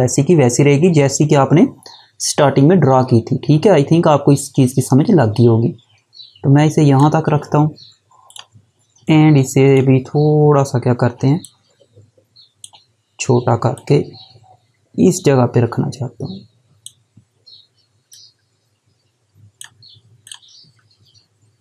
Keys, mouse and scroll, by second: 11.0 click, 13.3 click.